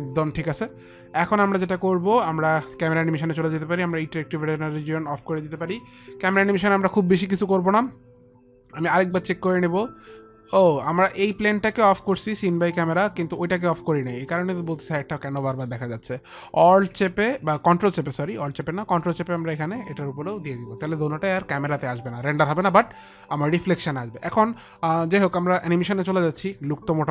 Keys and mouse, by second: 4.2 click, 10.8 click, 18.2 ctrl+click.